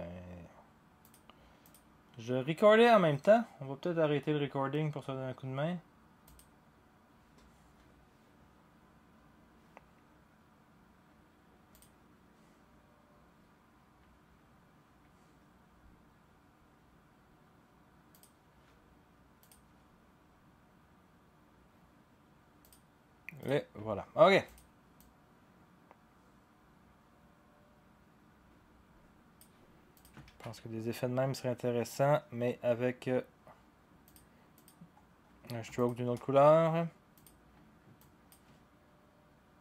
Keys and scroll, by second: 30.3 ctrl+a.